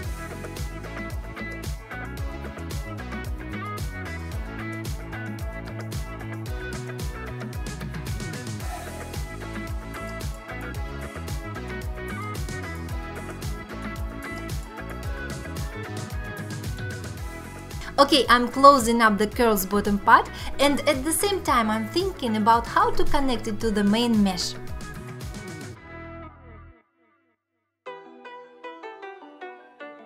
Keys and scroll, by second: 0.5 j, 0.7 alt+q, 0.9 Tab, 1.0 Tab, 1.1 1, 1.3 g, 2.4 j, 3.7 j, 5.3 j, 6.1 j, 6.7 j, 7.0 shift+r, 7.1 Escape, 7.3 ctrl+e, 8.0 Tab, 9.8 1, 10.3 1, 11.2 alt+q, 11.4 alt+q, 12.2 2, 12.8 f, 12.9 1, 13.3 g, 14.5 g, 16.8 alt+q, 17.1-18.4 typing, 19.0 alt+q, 19.6 alt+q, 20.8 alt+q, 21.3 alt+q, 22.5 f, 23.0 1, 24.0 j, 26.4 2, 27.0 1, 27.4 2, 27.9 ctrl+r, 28.5 1.